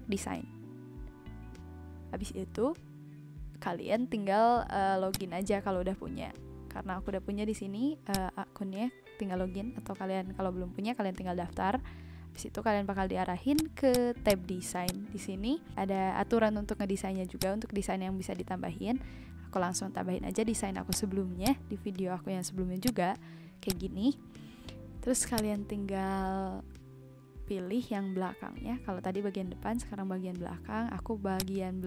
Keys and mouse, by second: 5.1 click, 8.1 click, 13.5 click, 17.3 click, 20.8 click, 22.8 click, 23.6 click, 25.3 click, 31.3 click.